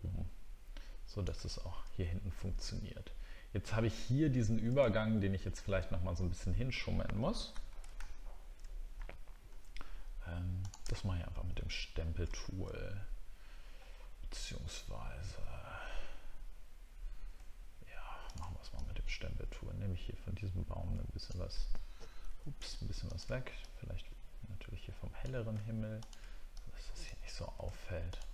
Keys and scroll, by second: 4.9 alt+scroll down 1, 7.5 ctrl+d, 7.9 alt+scroll up 1, 8.9 ctrl+scroll up 1, 12.3 ctrl+scroll up 1, 22.3 ctrl+z.